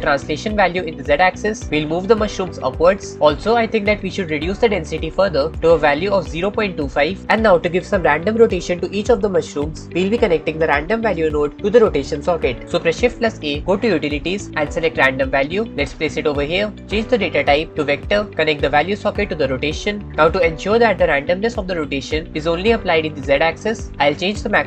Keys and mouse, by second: 0.9-3.2 drag, 5.3-7.0 drag, 13.5 shift+a, 17.2-18.3 drag, 19.2-20.1 drag.